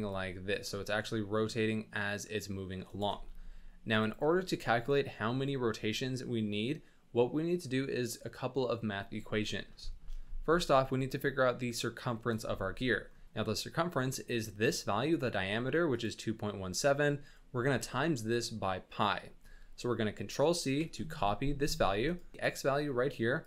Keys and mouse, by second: 0.1-2.9 drag, 3.1 space, 4.1 click, 9.8 shift+middle drag, 10.2 middle click, 15.9-22.1 drag, 22.3-23.4 drag.